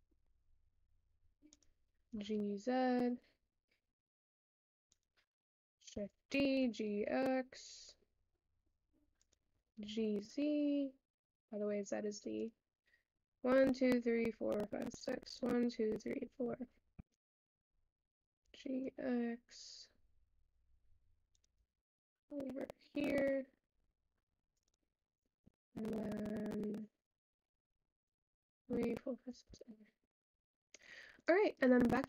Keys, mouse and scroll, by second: 5.9 shift+d, 17.4 shift+d, 29.3 Tab, 30.0 Tab, 31.1-32.0 drag.